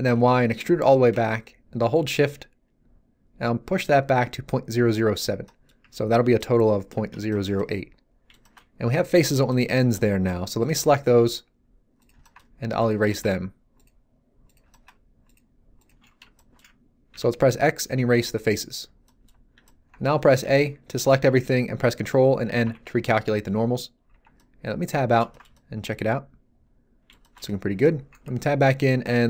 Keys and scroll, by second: 0.0 y, 17.0 x, 20.3 a, 22.6 ctrl+n, 24.1 Tab, 28.0 Tab.